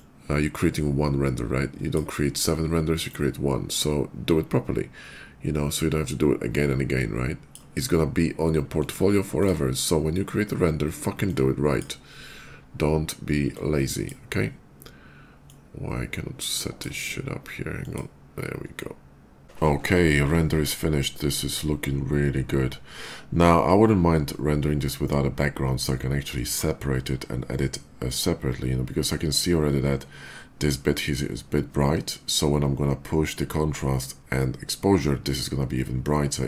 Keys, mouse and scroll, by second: 2.9-7.3 drag, 8.6 click, 9.0 click, 10.9 click, 13.4 click, 15.2-16.6 drag, 17.5 click, 19.2 click.